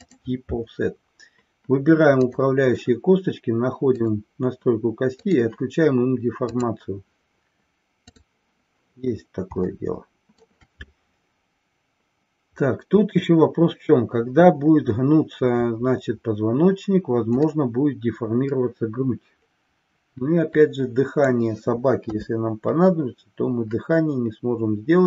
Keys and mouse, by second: 2.3 click, 5.2 click, 6.4 click, 9.6 shift+middle click, 17.4-21.4 middle drag, 22.3 KP_3.